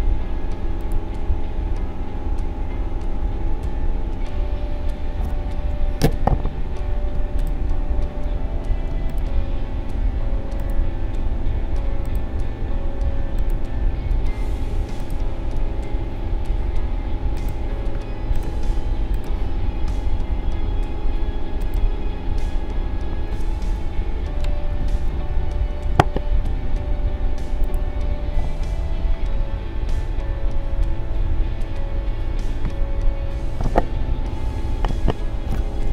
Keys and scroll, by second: 5.7 i.